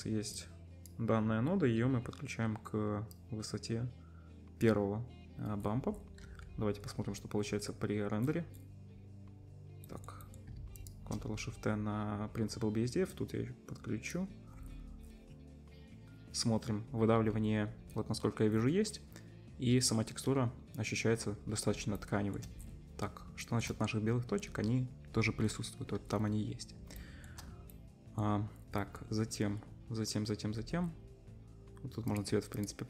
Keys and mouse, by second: 6.2 z, 9.3 middle click, 11.0-13.1 ctrl+shift+drag, 17.2-17.8 middle drag, 18.6-22.4 middle drag, 26.7-27.1 shift+middle drag, 27.7-32.2 middle drag, 32.2 click, 32.6 middle click, 32.6 click.